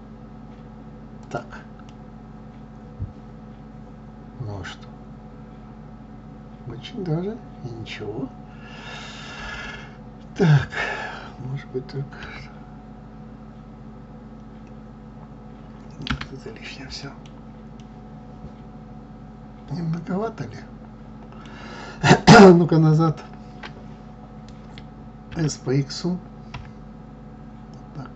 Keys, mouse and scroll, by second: 1.9-4.9 middle drag, 17.0-20.9 middle drag.